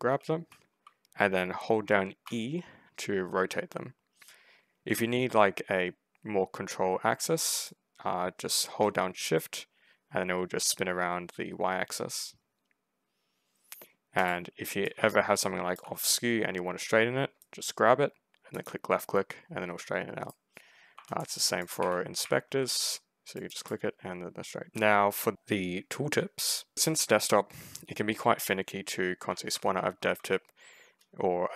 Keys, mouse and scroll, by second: 2.1 e, 7.4 click, 14.7 right click, 14.8 e, 17.3-20.1 right drag, 18.4 click, 20.8-22.9 typing, 20.9 middle click, 21.5 click, 22.8 right click, 23.2 click, 24.6 click, 25.8 w, 26.5 s, 26.8 s, 28.9-30.3 typing.